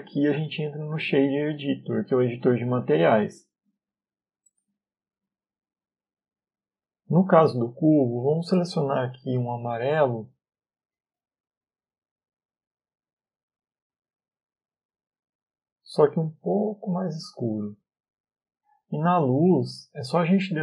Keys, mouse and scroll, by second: 4.3-4.7 scroll down 3, 4.3 n, 4.6 middle click, 5.8-6.2 scroll down 1, 6.2 middle click, 7.4 click, 8.5 click, 19.7 click.